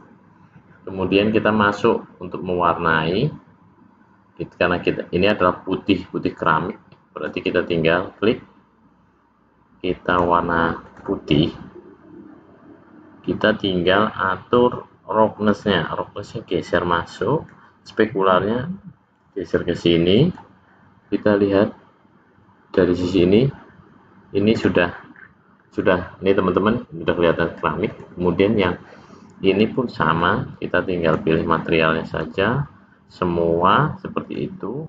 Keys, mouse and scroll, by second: 3.7 click, 7.0 click, 10.0 click, 10.8 click, 15.5 click, 18.1 click, 24.5 click, 25.1-25.7 scroll up 4, 27.4-27.8 scroll up 1, 27.8 click, 30.1 click, 32.2 click, 33.6 click.